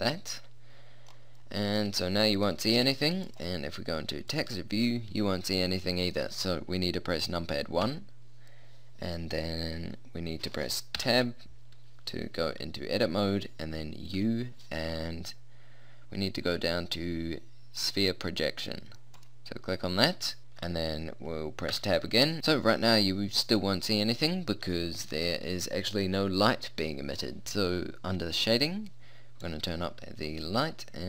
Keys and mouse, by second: 1.2 click, 3.2-4.4 drag, 4.6 click, 7.8 KP_1, 11.0 Tab, 14.2 u, 21.8 Tab, 22.4 KP_1, 29.4-31.0 drag.